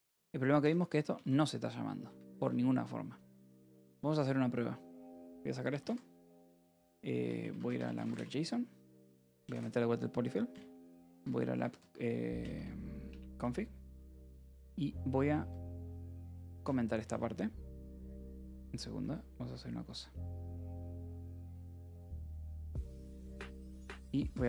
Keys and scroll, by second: 0.9 j, 1.8 shift+v, 2.0 Escape, 2.2 k, 2.8 j, 4.5 alt+p, 4.6 alt+w, 6.3 alt+p, 6.4-9.0 typing, 10.1 ctrl+s, 10.4-16.9 typing, 18.2 u, 21.2 y, 22.2 ctrl+r, 23.1-24.4 typing.